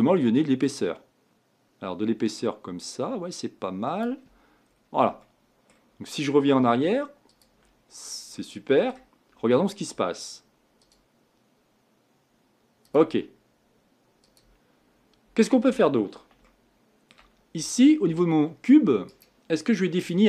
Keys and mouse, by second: 7.3-8.6 drag, 12.9 middle click.